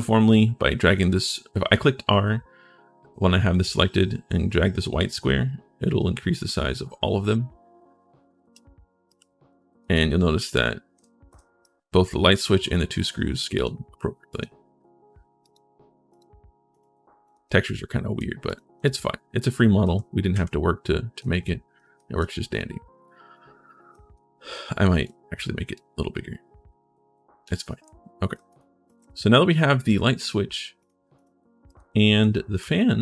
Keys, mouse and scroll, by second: 4.7-8.3 drag, 8.7-11.2 typing, 8.9-10.6 drag, 13.3 click, 15.2 click, 15.9 click, 16.5 click, 17.0 click, 17.4 right click, 18.2 right click, 18.6 ctrl+right click, 19.3 right click, 19.6-21.9 typing, 23.9 w, 24.8-27.2 drag, 27.6 click, 27.6 s, 28.3 click, 28.6 click, 29.6 click, 29.9 3, 30.6 click, 30.9 click, 31.4 click, 32.0 right click.